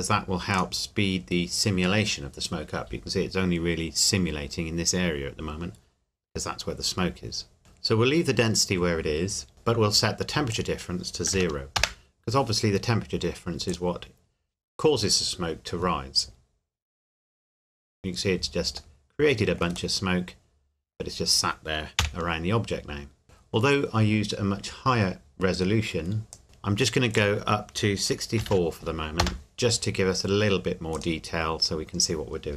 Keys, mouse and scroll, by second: 10.5 click, 11.3 KP_0, 11.8 KP_Enter, 13.7 click, 20.0 middle click, 20.2 middle click, 22.0 KP_1, 26.3 click, 28.4 KP_6, 28.5 KP_4, 29.2 KP_Enter, 30.9 click.